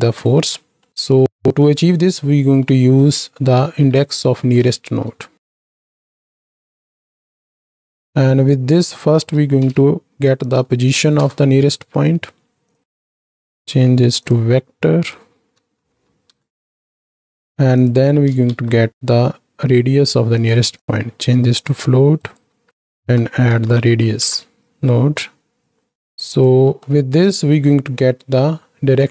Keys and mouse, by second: 0.8 click, 0.8 middle click, 1.2 click, 1.2 middle click, 2.6 click, 2.6-2.9 middle drag, 3.7 ctrl+space, 4.5 click, 4.8 shift+a, 8.4-12.6 drag, 12.8 drag, 13.2-14.3 drag, 14.8-17.4 drag, 18.5 ctrl+shift+d, 20.8-21.6 drag, 22.1 ctrl+click, 22.7-26.5 drag, 26.8 middle click, 27.8 middle click.